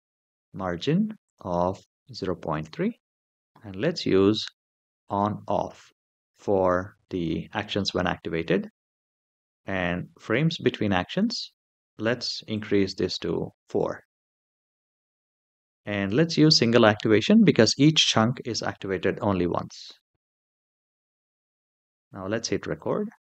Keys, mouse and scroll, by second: 1.0-2.4 drag, 3.3 scroll down 3, 4.8 click, 12.3 click, 20.1 click, 22.5 click.